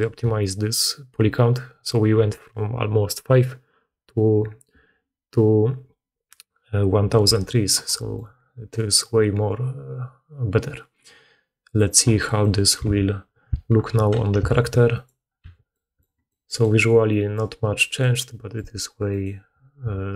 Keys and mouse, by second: 12.6-13.9 alt+middle drag, 12.7 alt+q, 13.8 alt+h, 13.9 alt+click, 14.3 alt+a, 14.4 middle click, 14.8 click, 15.3 h, 16.2-19.0 middle drag, 19.0 click.